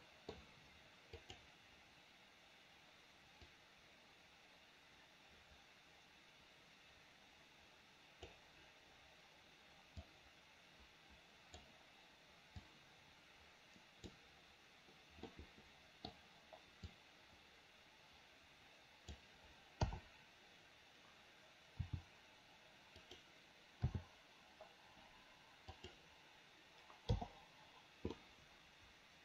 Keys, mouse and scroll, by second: 0.0 middle click, 1.3 click, 3.6-8.5 drag, 10.0-11.7 drag, 12.8-14.3 drag, 15.4 middle click, 17.1-19.3 drag, 19.9 KP_7, 21.9 r, 23.9 g, 27.2 i, 28.2-29.2 middle drag.